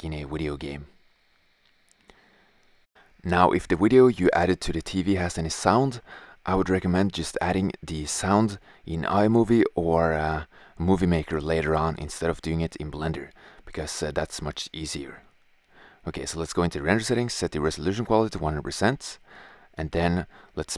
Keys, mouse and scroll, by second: 6.2 shift+z, 9.7 shift+z, 10.9 shift+f, 15.8-18.3 drag.